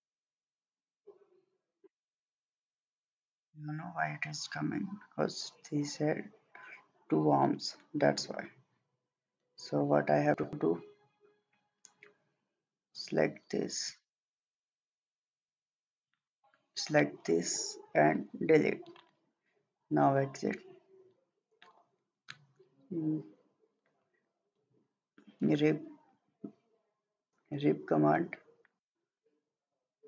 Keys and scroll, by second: 18.3 Delete.